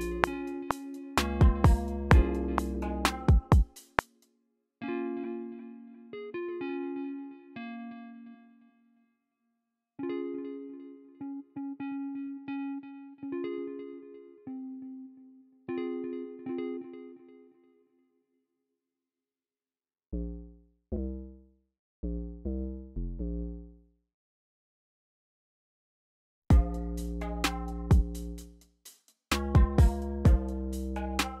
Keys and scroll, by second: 3.7 space, 4.1 super+z, 17.6 y, 18.7 e, 23.6 typing, 26.4 space.